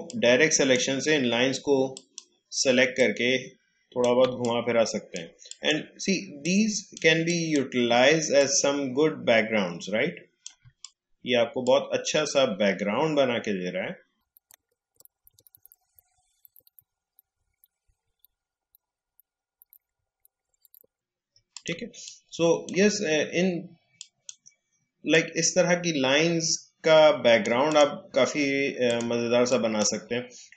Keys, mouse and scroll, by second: 4.2 space, 4.7 space, 5.4 click, 5.5-10.6 drag, 10.6 space, 14.9 alt+scroll down 1, 15.1-16.5 drag, 15.1 space, 16.7 space, 17.1-20.7 drag, 20.9-21.3 alt+scroll down 1, 21.3 alt+scroll up 1, 21.5 click, 21.7 space, 22.0 click, 22.2 space, 23.9-30.5 drag.